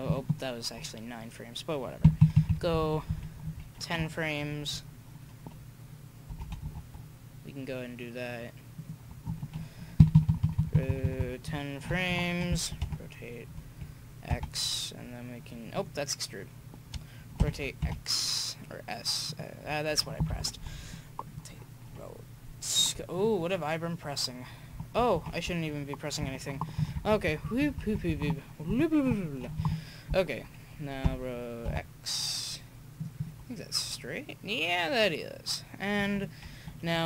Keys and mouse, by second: 2.0 Right, 2.2-2.9 Right, 3.4 Right, 6.3 r, 10.0 Right, 10.2 Right, 10.3 Right, 10.4 Right, 10.8 Right, 10.9 Right, 11.4 Right, 12.8 s, 17.4 r, 20.2 i, 25.1 ctrl+z, 26.8 Right, 26.9 Right, 27.1 Right, 27.2 Right, 27.6 Right, 27.7 Right, 28.0 Right, 31.0 r, 33.2-34.7 drag, 34.7 middle drag.